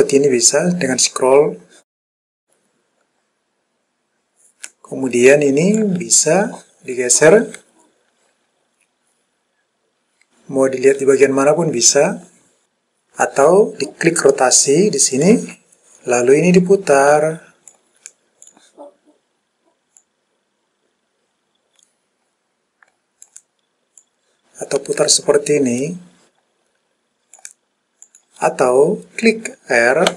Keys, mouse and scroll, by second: 0.5-1.0 scroll up 1, 1.0-1.6 scroll up 2, 1.6-2.4 scroll down 2, 2.4-3.3 scroll up 3, 3.3-4.1 scroll down 2, 4.2-4.8 scroll down 2, 5.9-12.7 drag, 15.3 click, 16.7-17.8 drag, 18.5 click, 20.1 click, 24.1 click, 28.2 click.